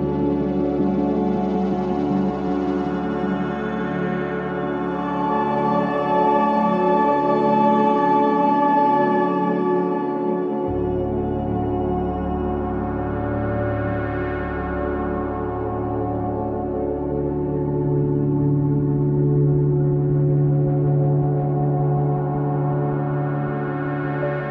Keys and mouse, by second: 0.0 click, 0.4 click, 1.3 s, 2.0-3.0 drag, 2.5 s, 3.7 click, 4.4 click, 4.8-5.9 ctrl+alt+drag, 6.4-8.4 drag, 9.0 click, 9.7-10.5 alt+drag, 10.8 alt+click, 12.1-13.0 typing, 13.9 click, 15.3 alt+shift+click, 16.7-17.3 alt+drag, 17.6 ctrl+alt+click, 18.1 alt+shift+drag, 18.5-18.8 ctrl+alt+drag, 19.0-21.7 alt+drag, 22.5 ctrl+alt+drag, 22.7 typing, 23.4 shift+click, 24.4 ctrl+l.